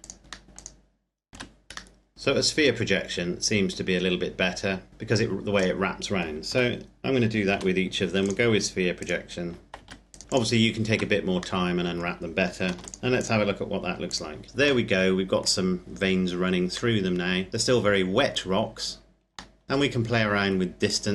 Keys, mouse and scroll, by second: 0.3 middle click, 0.4 click, 1.0 Tab, 1.8 middle click, 3.6 scroll down 1, 4.4-5.3 scroll up 1, 5.3 right click, 6.3 Tab, 7.3 u, 8.0 click, 8.7 right click, 9.6 Tab, 9.8 right click, 10.2 click, 10.6 Tab, 11.4 middle click, 12.4 ctrl+s, 12.6 click, 14.6 middle click, 18.4-19.2 scroll up 1, 19.3 shift+middle click, 19.6 scroll up 1, 20.5 click.